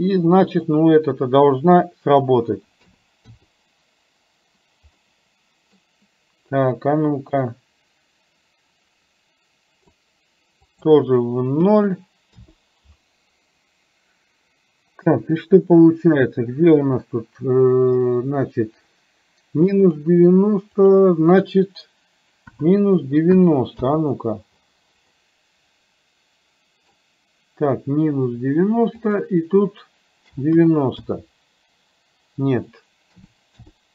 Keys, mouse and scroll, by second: 0.6-3.4 drag, 5.0 middle click, 7.4-9.9 drag, 10.6-12.5 drag, 15.0-20.0 drag, 20.8-24.0 drag, 25.3-27.0 middle drag, 29.0-31.1 drag, 32.5-33.8 drag.